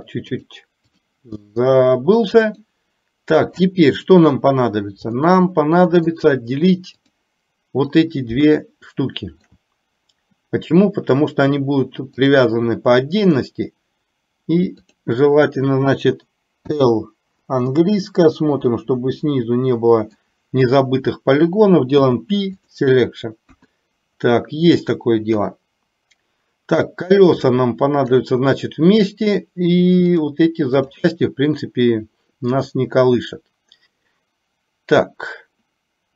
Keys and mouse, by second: 0.3 click, 2.7 click, 5.3 middle click, 7.1 click, 8.9 shift+middle click, 12.3-13.5 drag, 14.9 click, 16.9 l, 18.0-20.3 middle drag, 22.0 p, 23.6 KP_1, 25.3 KP_3, 27.7 shift+middle click, 30.3 click.